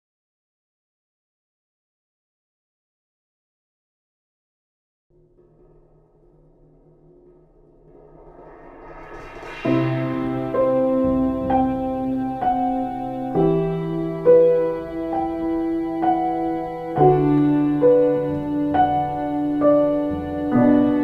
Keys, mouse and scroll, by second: 5.9 x, 16.1 ctrl+space, 17.3 ctrl+space.